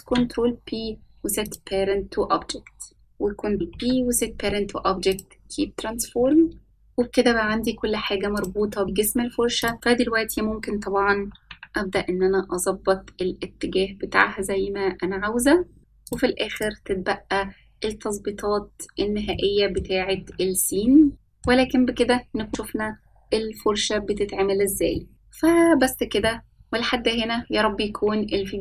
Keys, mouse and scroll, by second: 0.5 shift+click, 2.9 ctrl+p, 5.2 ctrl+z, 6.6 scroll up 6, 9.0-10.0 scroll down 6, 10.5 scroll up 1, 12.0 click, 13.4 click, 15.4 r, 18.0 g, 20.6 click, 21.1 middle click, 21.1-22.0 scroll up 4, 24.3-24.9 shift+middle drag, 25.5 click, 25.6 scroll up 3, 25.8 shift+middle click, 26.0 Tab, 26.1 ctrl+r, 26.3 ctrl+z, 26.4 shift+middle click, 26.6 click, 26.7 middle click, 26.8 click, 26.9 middle click, 27.0 shift+middle click, 27.0 scroll down 1, 27.2 g, 27.5 middle click, 27.5 scroll down 2, 27.6 scroll up 5, 27.6 shift+middle click, 27.8 scroll down 2, 27.9 scroll up 2, 27.9 middle click, 28.1 click, 28.1 shift+middle click, 28.1 click, 28.2 click, 28.3 Tab, 28.5 ctrl+r.